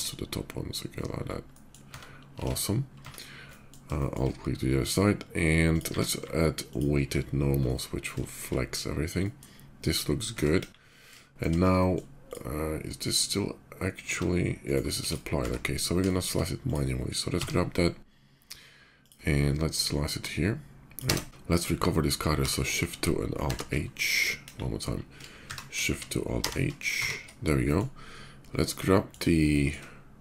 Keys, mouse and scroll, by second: 0.4 middle click, 0.8 middle click, 1.2 middle drag, 3.0 Tab, 3.1 middle click, 3.7 shift+middle drag, 4.1 shift+middle click, 4.9 shift+middle drag, 5.4 shift+click, 5.6 q, 6.3 alt+q, 6.5 alt+click, 7.2-7.8 alt+middle drag, 8.0 shift+middle drag, 8.3-9.2 shift+middle drag, 9.7 shift+middle click, 10.6 KP_5, 10.9-11.3 middle drag, 11.5 middle click, 12.0 click, 12.7 shift+click, 14.4 right click, 14.8 x, 14.8 click, 15.5 x, 15.8 middle click, 16.4 click, 17.0 d, 18.6 click, 19.4-20.7 drag, 20.9 space, 21.2 alt+x, 22.1 shift+2, 22.9 alt+shift+2, 23.2 alt+h, 23.9 right drag, 24.4 KP_5, 25.2 shift+2, 25.8 alt+shift+2, 26.4 alt+shift+h, 26.7 shift+2, 27.3-28.0 middle drag, 28.3-28.8 middle drag, 29.0-29.4 shift+middle drag, 29.9 shift+click.